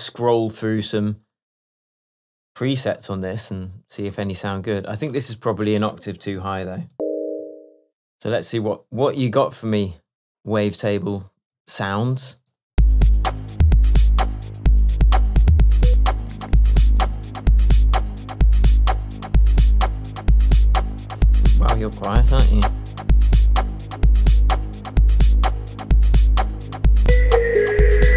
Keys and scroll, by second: 3.2 super+l, 6.5 super+a, 7.0 shift+super+Down, 7.5 shift+Down, 7.6 shift+Tab.